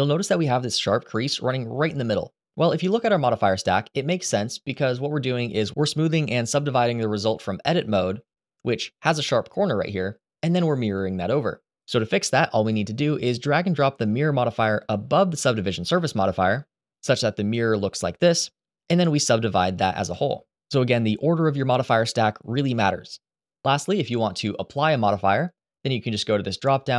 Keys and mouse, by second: 0.0 Tab, 5.1 click, 5.8-6.8 middle drag, 10.6 click, 13.9-15.4 drag, 17.0 click, 19.8 click, 24.4 click, 26.4-26.9 drag.